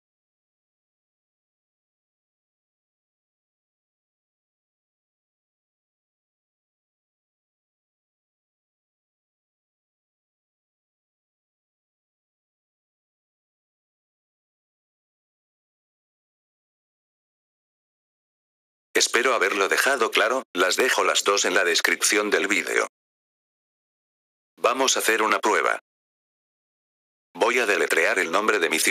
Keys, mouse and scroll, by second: 1.4 click, 3.6 click, 4.4 click, 8.8 click, 10.0 click, 11.1-13.2 drag, 18.8 click, 24.5 click.